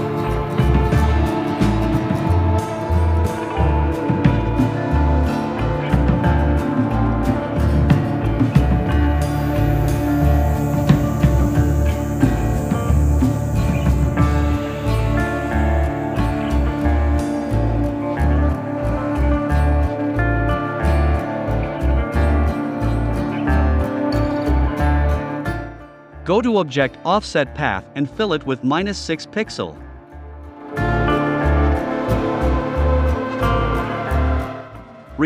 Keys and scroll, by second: 3.6 Return.